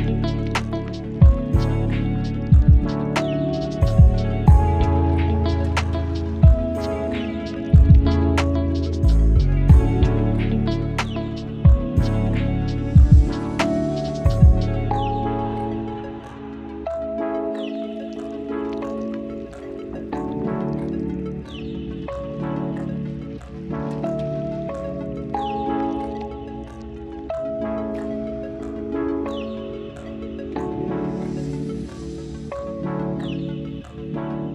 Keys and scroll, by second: 8.3 ctrl+j, 9.5 ctrl+shift+e, 16.1 ctrl+d, 22.5 ctrl+z, 27.9 space, 30.9 space, 31.2 ctrl+z.